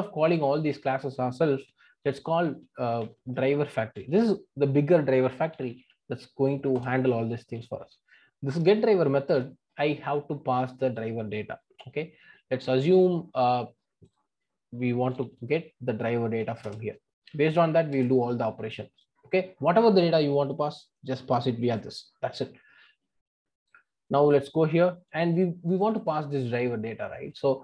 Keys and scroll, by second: 6.7 Return, 16.6 Return.